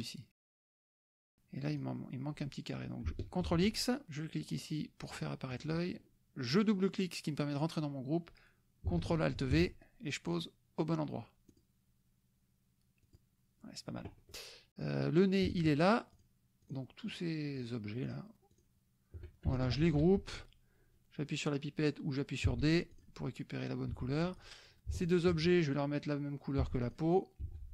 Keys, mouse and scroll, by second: 1.7 click, 3.5 ctrl+x, 4.1 click, 5.1 click, 5.5 click, 6.5 click, 9.4 ctrl+alt+v, 10.3 click, 11.5 click, 13.0 click, 14.9 click, 15.6 shift+click, 16.1 shift+click, 16.8 shift+click, 17.2 shift+click, 18.2 shift+click, 18.5 shift+click, 19.8 ctrl+g, 22.5 d, 22.9 click, 23.9 F1, 24.5 click, 25.0 shift+click, 26.6 d, 26.8 click, 27.4 F1.